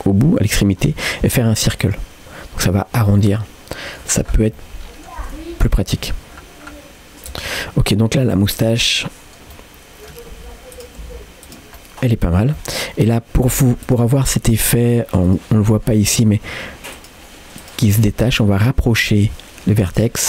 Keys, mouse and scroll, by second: 1.8 click, 2.0 typing, 3.2 middle click, 4.3-4.6 scroll down 2, 4.6 middle click, 5.3 r, 7.6-8.7 middle drag, 9.0 middle click, 9.6 middle click, 10.3 r, 11.1 g, 11.8 middle click, 12.3 scroll up 1, 12.6-13.9 middle drag, 13.9 click, 15.3 click, 15.6 middle click, 16.1 g, 17.6 click, 18.0 g, 19.0 middle click, 19.9 click.